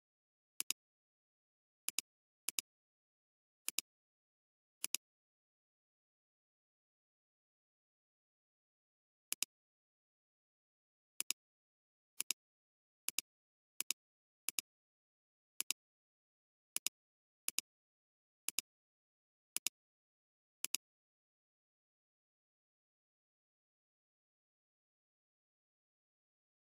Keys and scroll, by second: 0.6 space, 7.6 ctrl+alt+Return, 9.7 space, 11.2 alt+space, 22.4 ctrl+alt+Return.